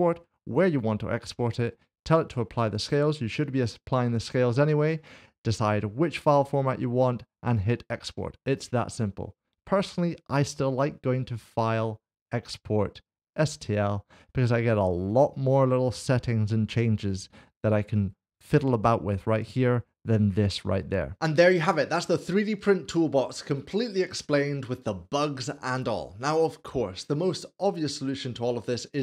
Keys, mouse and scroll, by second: 4.8 click, 7.0 click, 11.1 click, 13.4 click, 19.4 click.